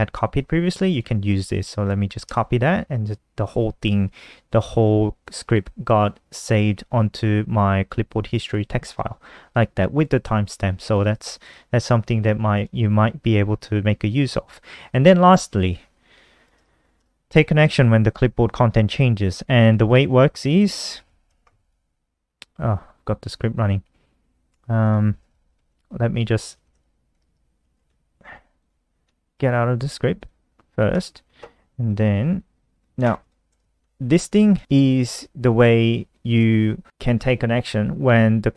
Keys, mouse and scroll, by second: 0.7 click, 1.9 ctrl+c, 2.8-5.0 scroll down 7, 5.0 click, 8.6-9.7 scroll down 2, 9.7 click, 10.6 click, 11.1 click, 12.2 click, 12.5-13.1 scroll down 1, 13.1-15.3 scroll down 3, 15.3 click, 16.3 BackSpace, 19.6 click, 20.9 ctrl+c, 21.3 click, 23.9-28.3 typing, 28.3 click, 28.8 ctrl+s, 29.0 F5, 29.9 click, 30.6 Escape, 31.5 click, 31.9 click, 32.6 ctrl+c, 32.9 click, 33.4 shift+Home, 34.3 ctrl+s.